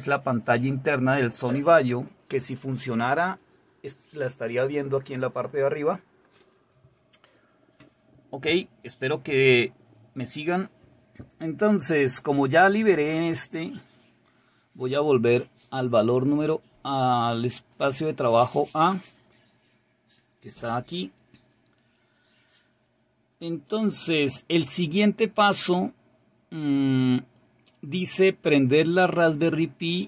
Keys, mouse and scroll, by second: 17.6 click, 25.5-30.0 scroll down 2.